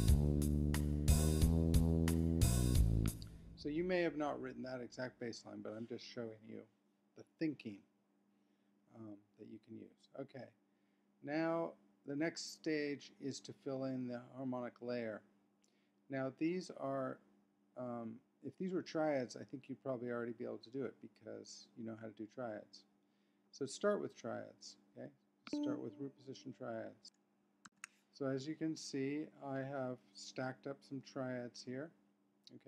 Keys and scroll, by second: 27.0 Left, 27.7 shift+super+p.